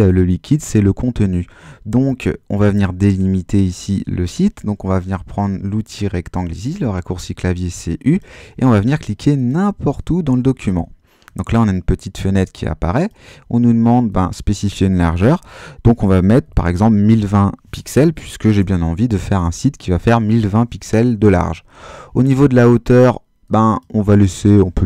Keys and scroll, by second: 16.2-18.5 typing.